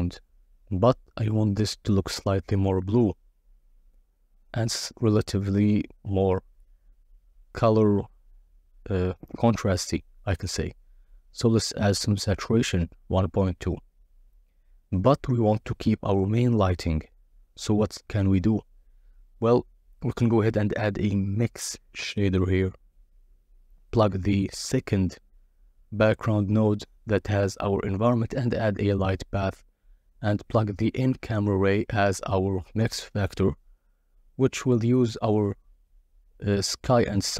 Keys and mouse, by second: 1.0-2.0 drag, 2.5 click, 2.8 shift+a, 3.7 click, 5.0-5.6 drag, 8.0 click, 11.3-14.2 drag, 14.5-15.0 drag, 15.3 g, 16.4 shift+a, 20.2 click, 21.1-21.6 drag, 22.6-23.2 drag, 23.7 g, 24.4 shift+a, 28.8 click, 30.7-31.8 drag, 36.8-37.3 drag.